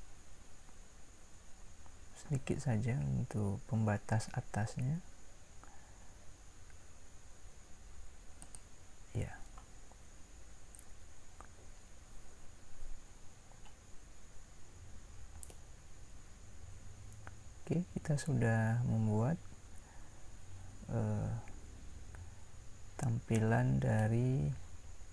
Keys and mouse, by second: 1.2 e, 15.7-17.5 middle drag.